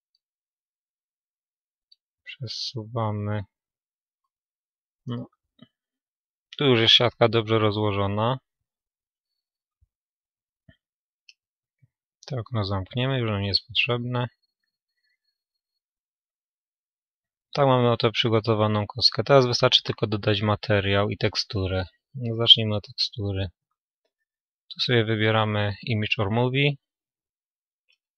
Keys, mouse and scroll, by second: 0.8 g, 4.2-5.4 drag, 4.2-7.2 middle drag, 7.2 a, 13.0 right click, 15.3-19.3 middle drag, 18.2 Tab, 19.3-20.3 scroll down 1, 20.3-28.1 drag.